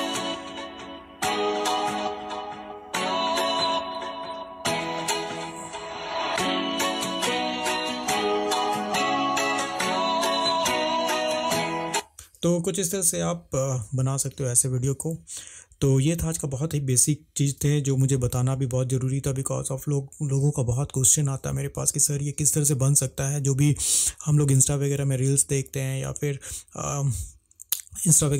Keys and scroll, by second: 13.3 Escape.